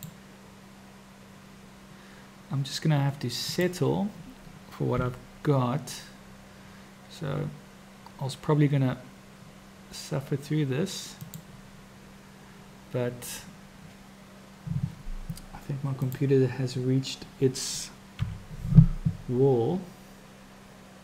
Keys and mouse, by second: 3.5-4.9 drag, 4.9 g, 18.2 r.